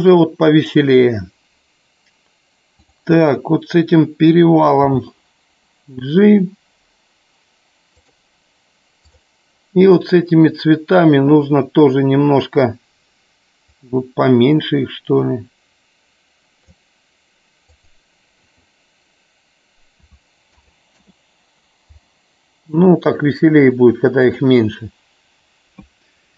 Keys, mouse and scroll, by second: 2.8 click, 8.9 click, 13.9-17.6 drag, 18.5-21.6 drag.